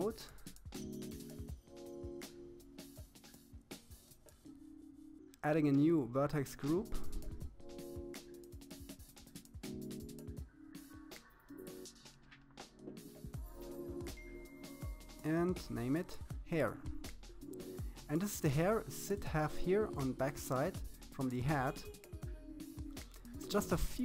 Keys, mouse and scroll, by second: 0.5-2.1 middle drag, 2.6 click, 3.4-4.2 scroll up 4, 4.4-6.2 drag, 6.3-7.9 scroll down 4, 8.1 click, 9.6 click, 11.0 click, 15.4-16.4 middle drag, 16.4-17.0 scroll up 4, 17.0-20.0 shift+middle drag, 20.3-21.0 scroll up 2, 21.0-21.7 scroll down 1, 21.7-22.9 scroll up 1, 22.9 scroll up 1.